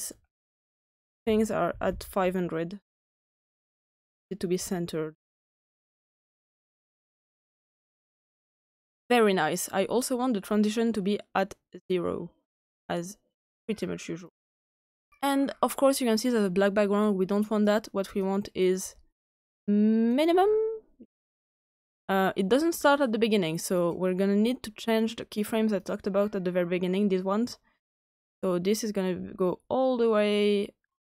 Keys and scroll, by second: 1.2-1.7 typing, 5.1-5.8 typing, 6.9 Return.